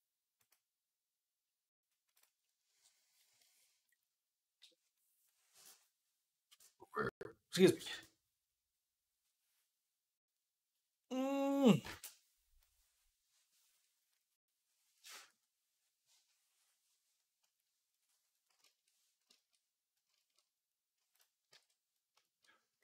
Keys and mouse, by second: 3.0-18.2 shift+right drag, 18.3 shift+right click, 18.6-20.3 shift+drag, 21.8 shift+right click, 22.4 click, 22.6-22.8 right drag.